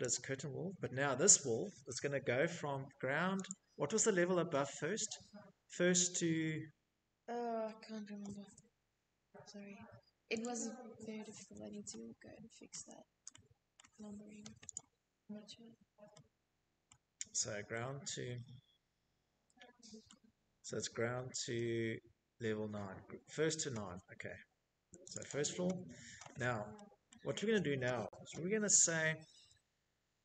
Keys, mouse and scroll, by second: 1.1 click, 6.2 Escape, 6.7 Escape, 8.0 click, 8.8 middle click, 8.9 middle click, 9.1 middle click, 9.3 middle click, 10.3 shift+middle click, 11.3 shift+middle click, 12.3 click, 13.3 middle click, 13.3 middle click, 14.5 shift+middle click, 15.1 scroll, 17.6 shift+middle click, 18.0-19.5 scroll, 22.7 right click, 22.8 click, 23.1 right click, 23.2 click, 24.6 middle click, 26.2 middle click, 26.2 middle click, 26.3-27.2 scroll, 29.4 click.